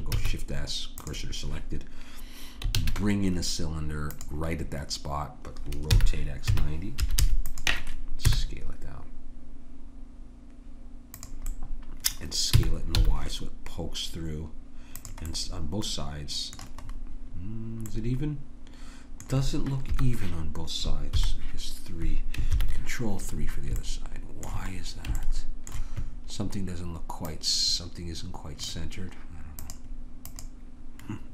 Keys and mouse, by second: 0.2 shift+s, 2.7 shift+a, 5.9 r, 8.2 s, 12.5 s, 18.4-19.9 middle drag, 19.9 KP_1, 21.2 KP_3, 23.7 middle click, 27.3-31.3 drag.